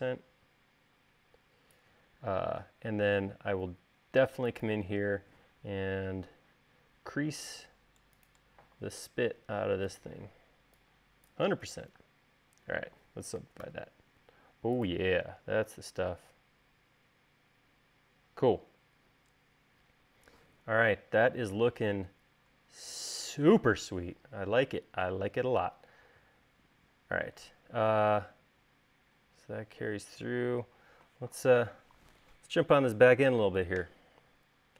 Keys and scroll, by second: 3.6 space, 12.4 space, 14.1 u.